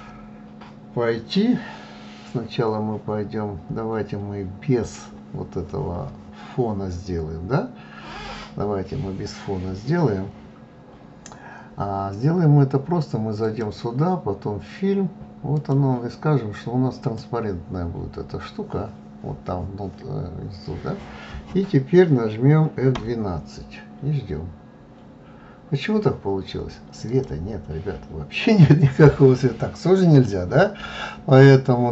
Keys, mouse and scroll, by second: 12.0 click, 15.5 click.